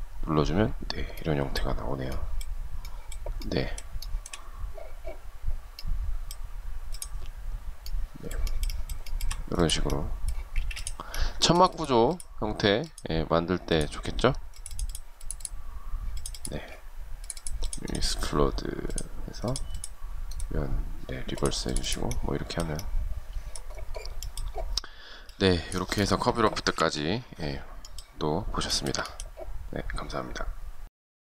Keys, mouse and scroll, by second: 3.2 shift+middle click, 8.2 shift+middle click, 9.7 space, 26.0 Delete, 27.8 shift+scroll down 1, 27.9 shift+middle click.